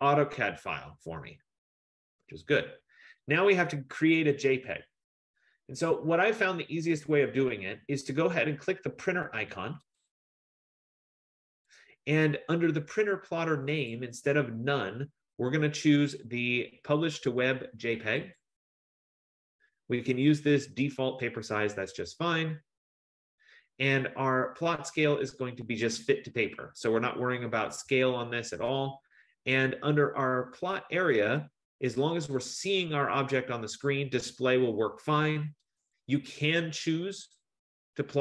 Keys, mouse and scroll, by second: 1.6 F15, 10.0 click, 14.1 click, 18.5 click, 21.5 click, 36.0 click.